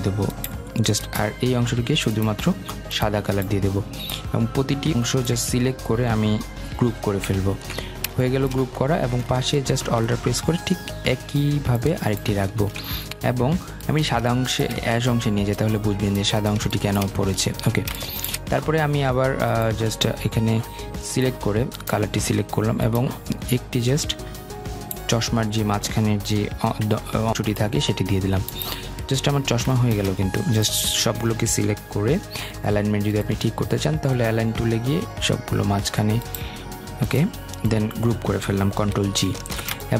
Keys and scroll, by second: 6.6 ctrl+g, 38.8 ctrl+g.